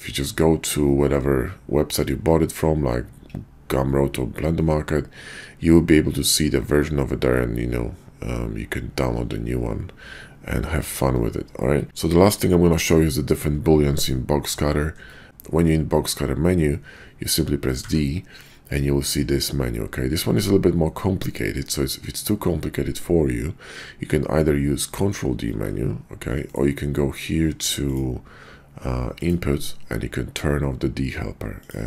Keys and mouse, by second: 11.5-11.9 shift+drag, 14.0 shift+click, 15.0 middle click, 17.6 d, 25.5 ctrl+d, 28.5-31.8 drag.